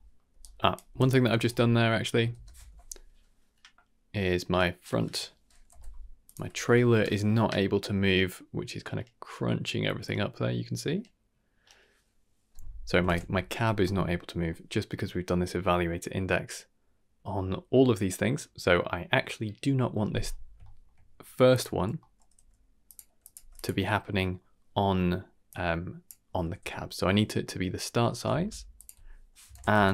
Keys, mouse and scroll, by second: 0.3 d, 0.9 d, 0.9-2.3 right drag, 2.3 shift+space, 6.2 click, 6.4 n, 13.0 shift+space, 13.8 middle click, 14.3 middle click, 20.6 shift+middle click, 21.5 click, 22.0 middle click, 22.3 g, 23.2 click, 23.3 g, 23.9-24.3 scroll up 2, 24.1 middle click, 25.5-26.0 drag, 26.6-27.1 scroll up 2, 27.4 middle click, 28.3 shift+a.